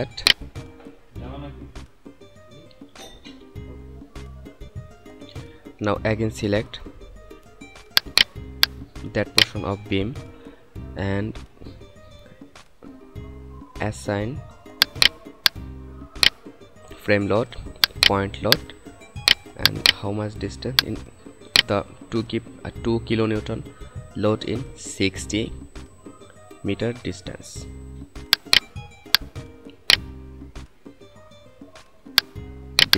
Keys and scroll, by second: 3.9 F9.